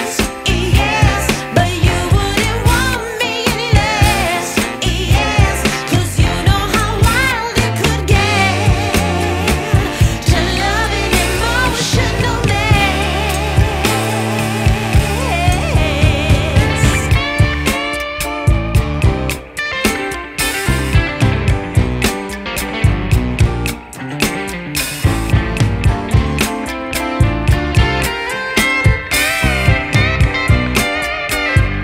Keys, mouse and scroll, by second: 26.6 Delete, 27.2 double click.